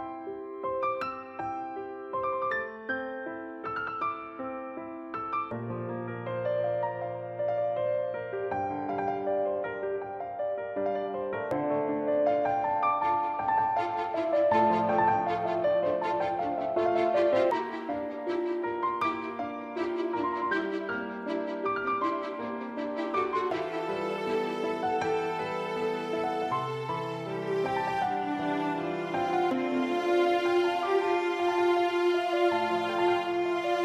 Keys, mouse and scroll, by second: 0.8 click, 2.0 right click, 2.6 click, 3.8 middle click, 7.8 a, 8.5 b, 10.5 middle click, 12.8 s, 14.3 click, 14.8 s, 19.7 click, 19.9 middle click, 21.8 click, 26.5 middle click, 28.2-28.6 scroll up 2, 28.5 middle click, 29.6 alt+scroll down 1, 30.4 shift+scroll down 1, 31.2 middle click, 33.2 s.